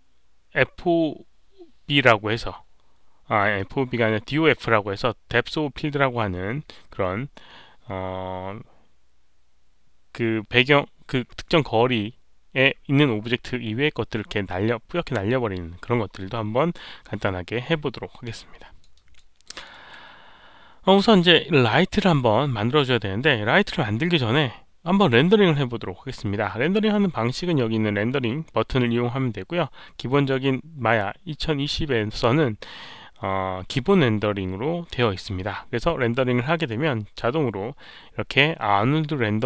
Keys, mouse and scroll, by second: 2.9 scroll up 1, 3.5 click, 4.7-5.0 scroll down 1, 5.8-6.1 scroll down 1, 18.5 alt+click, 18.9 alt+right click, 19.4 alt+middle click, 29.3 alt+middle click, 29.3 alt+right click, 36.5 click.